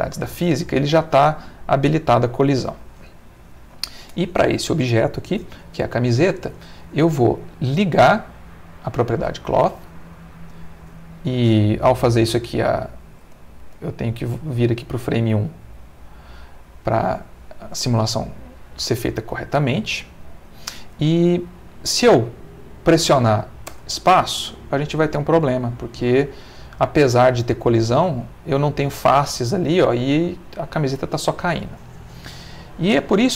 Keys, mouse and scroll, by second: 3.4 click, 7.8 click, 9.9-10.9 middle drag, 11.9-13.1 drag, 13.2 middle click, 13.9 middle click, 14.5 middle click, 15.4 click, 16.6-17.6 middle drag, 18.3-22.2 ctrl+middle drag, 23.6 space, 29.6 Escape, 32.3-33.3 middle drag.